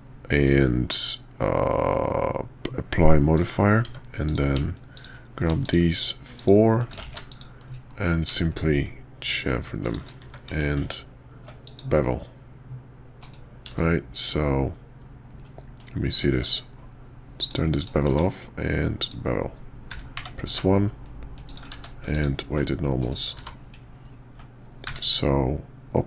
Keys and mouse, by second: 0.5 q, 3.8 Tab, 4.2 click, 4.9 shift+click, 5.6 shift+click, 6.4 shift+click, 7.1 ctrl+z, 7.3 shift+click, 7.9 ctrl+b, 10.2 Tab, 10.5 q, 13.7 q, 15.4-15.8 drag, 16.1 ctrl+`, 18.1 q, 21.7 q, 23.3 q, 24.8 q.